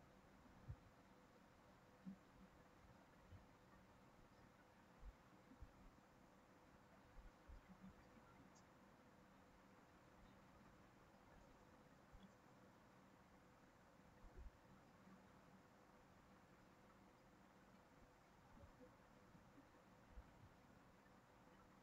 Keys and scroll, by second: 11.9 ctrl+c, 12.1 ctrl+v, 15.4 ctrl+z.